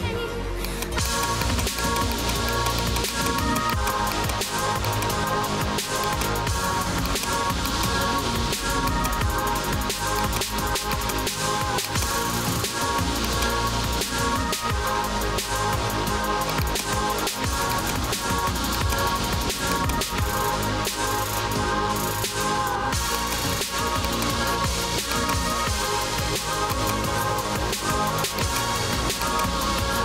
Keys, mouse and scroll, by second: 0.6 scroll, 0.8 click, 1.2 click, 1.5 click, 1.8 click, 2.2 click, 2.3 scroll, 2.6 click, 2.9 click, 3.2 click, 3.5 click, 3.8 click, 4.2 click, 5.0 click, 5.2 ctrl+c, 5.4 ctrl+d, 6.1 click, 6.3-6.9 typing, 7.1 click, 7.8 click, 8.0 ctrl+c, 8.2 ctrl+d, 9.0 click, 9.0-9.9 typing, 10.2 click, 11.0 click, 12.0 click, 13.4-15.3 typing, 13.4 click, 16.6 click, 16.7 click, 17.8 click, 18.5 0, 18.8 click, 19.8 alt+click, 20.2-22.7 typing, 23.2 click, 24.2 click, 25.2 click, 25.4-28.5 typing, 26.8 click, 28.4 click, 29.3 click.